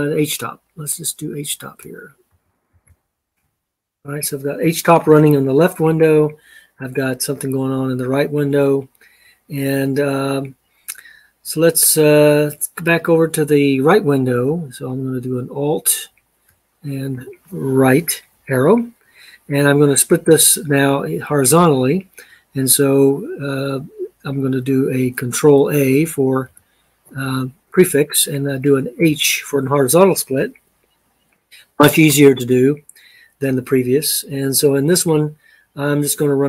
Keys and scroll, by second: 2.1-3.4 typing, 16.9 alt+Right, 26.2 ctrl+a, 28.8 h.